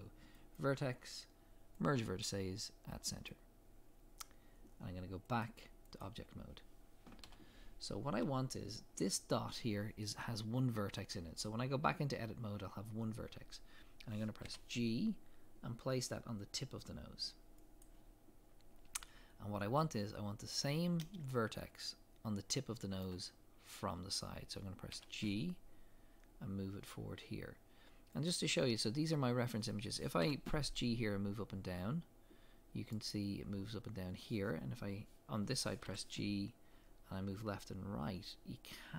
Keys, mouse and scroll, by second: 3.3 click, 7.2 KP_1, 7.9 scroll up 1, 14.4 g, 19.3 scroll up 1, 21.3 shift+middle click, 25.0 g.